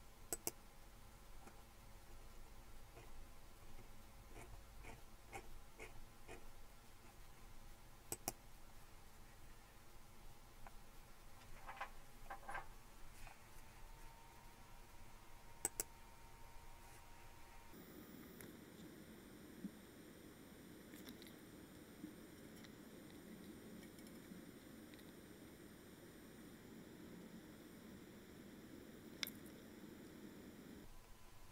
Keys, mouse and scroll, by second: 0.3 click, 1.9 click, 2.4-4.1 scroll up 3, 4.1-8.4 scroll up 4, 8.4-10.0 drag, 15.7 click, 17.5 click.